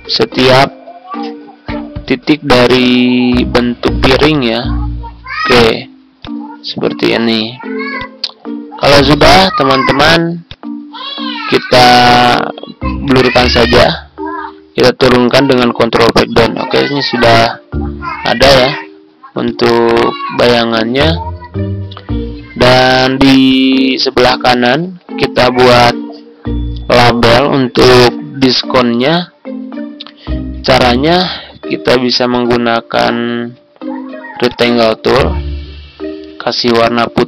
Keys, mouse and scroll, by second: 2.5-14.5 drag, 15.6 ctrl+Page_Down, 19.4 click, 23.0 z, 23.4-37.2 drag.